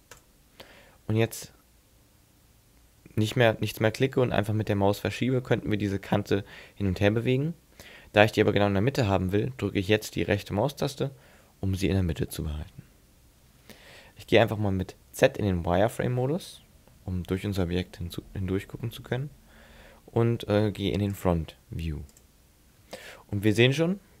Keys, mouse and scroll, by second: 15.9 z, 21.1 click, 22.2 click.